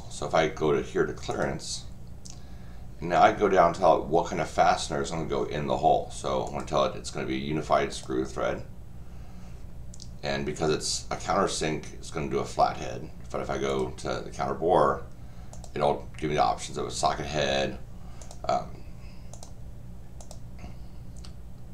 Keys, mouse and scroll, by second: 1.3 click, 6.4 click, 7.9 click, 13.7 click, 15.5 click, 18.2 click, 19.3 click, 20.2 click.